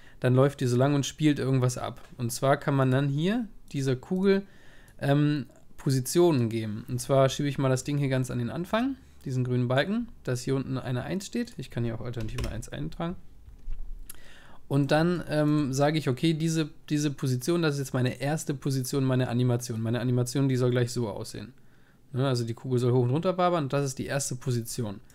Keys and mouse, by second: 3.8-7.1 drag, 3.8-7.1 right drag, 11.7-13.9 drag, 14.4-17.3 middle drag, 17.7-18.8 drag, 18.2 right click, 18.8-23.6 middle drag, 19.3 click.